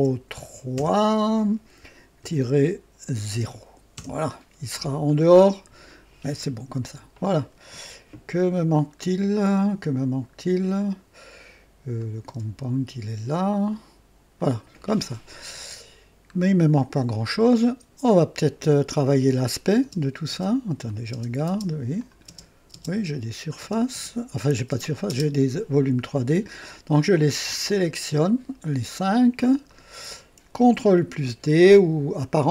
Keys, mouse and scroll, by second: 0.7 KP_3, 2.1 KP_Subtract, 3.3 KP_0, 3.9 KP_Enter, 3.9 Return, 6.6 scroll down 1, 11.9 click, 12.2 space, 14.3 click, 15.4 scroll up 2, 16.6 scroll down 2, 17.2-18.1 right drag, 19.5 click, 19.8-25.1 typing, 20.8 click, 21.9 click, 23.3 click, 24.4 click, 26.8 click, 27.6 ctrl+click, 28.1 ctrl+click, 28.9 ctrl+click, 29.6 ctrl+click.